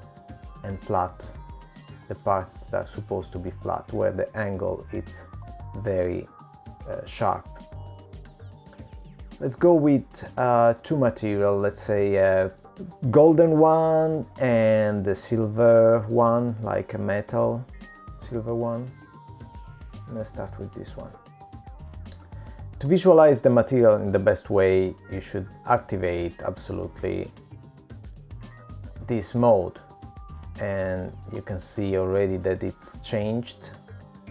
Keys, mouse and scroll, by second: 0.3-1.3 scroll down 3, 1.3 middle click, 3.0 middle click, 4.5 shift+middle click, 5.4-6.3 scroll up 2, 6.3-7.5 scroll down 2, 8.8 middle click, 12.7 click, 12.7 shift+middle click, 16.1 click, 17.3 click, 18.4 click, 18.4 middle click, 19.6 shift+middle click, 23.1 click, 32.8 click.